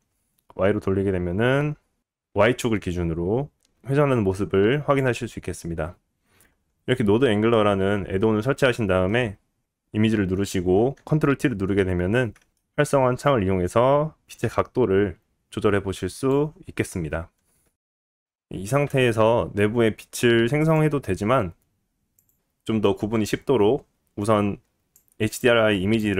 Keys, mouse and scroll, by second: 0.1-2.1 right drag, 2.1-3.4 drag, 3.4-4.9 right drag, 4.9-6.0 drag, 6.0-7.2 middle drag, 7.2 click, 7.4-9.0 middle drag, 9.0 click, 9.1-12.0 middle drag, 12.0 click, 12.1-13.6 middle drag, 13.6-17.8 drag, 18.1 middle click, 18.7 shift+a, 21.1-22.3 middle drag, 21.3 g, 25.2-26.1 drag.